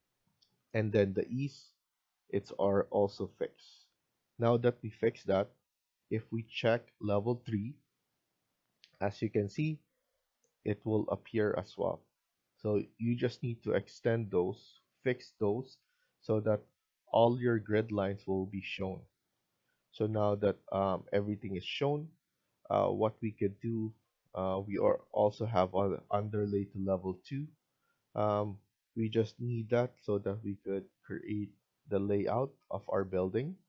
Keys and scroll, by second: 19.0 Escape, 19.2 Escape.